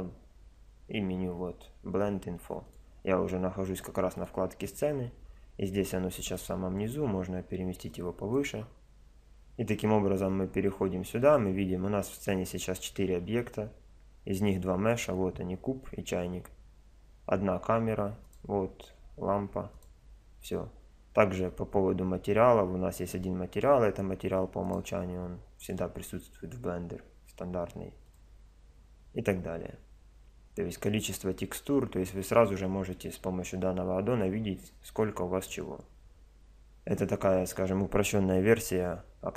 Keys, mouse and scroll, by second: 3.8-6.0 drag, 5.8 middle click, 6.4-12.8 drag, 14.9-16.8 drag, 17.7 middle click, 18.0-19.8 drag, 19.8-21.6 right drag, 24.6-27.4 drag, 27.4 middle click, 28.0-30.0 drag, 30.0-39.3 middle drag.